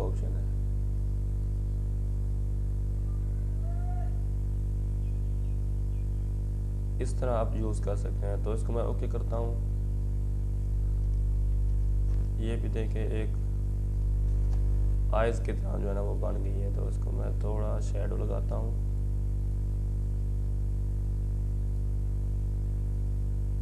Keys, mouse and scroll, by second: 1.7 Return, 2.6-6.0 drag, 8.9 click, 11.6-13.7 drag, 13.7 ctrl+t, 14.8-17.0 drag, 17.0 Return, 17.7 click, 19.7-23.6 drag.